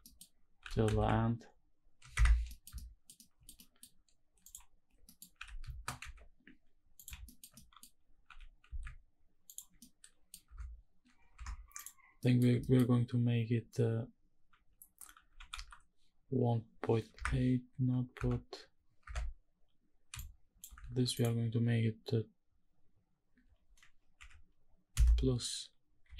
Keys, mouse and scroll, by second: 0.3 g, 0.6 z, 1.8 Escape, 2.1 scroll down 1, 2.2 middle click, 2.4 shift+middle click, 2.9 shift+middle click, 3.2 middle click, 3.6-4.1 scroll up 1, 4.1 click, 4.6 scroll down 1, 4.7 middle click, 5.0 g, 5.7 z, 6.7 click, 7.0 shift+middle click, 7.2 middle click, 7.9 g, 8.4 z, 9.2 ctrl+click, 9.5 middle click, 10.1 Tab, 10.1 scroll down 1, 10.4-11.0 scroll up 4, 11.0 Tab, 11.4 click, 11.9 middle click, 12.3 shift+middle click, 15.0 g, 15.2 x, 16.9 Escape, 17.8 Tab, 18.7 Tab, 19.8 shift+click, 20.6 ctrl+z, 20.8-26.1 drag.